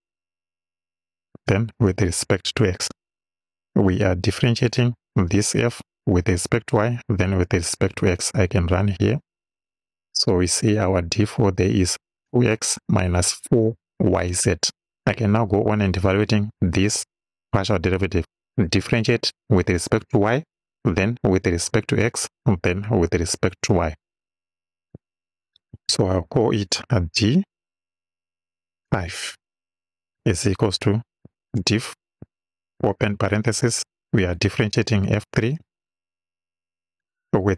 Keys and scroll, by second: 0.5 y, 1.4 ,, 1.9 x, 3.4 Right, 25.0 Return, 27.8 d, 29.1 5, 30.2 =, 31.3 d, 31.6 i, 32.8 shift+f, 33.1 shift+9, 34.4 f, 35.6 3, 36.8 ,.